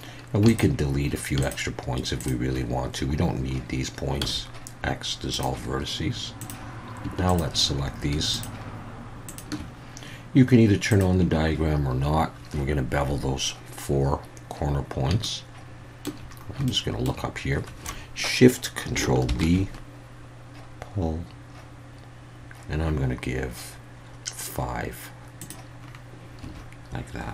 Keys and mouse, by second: 0.5 shift+click, 2.2 shift+click, 4.2 x, 7.3 shift+click, 9.3 shift+click, 10.9 click, 15.2 shift+middle click, 16.7-17.0 shift+middle drag, 19.3 ctrl+shift+b, 25.4 click, 26.4 a.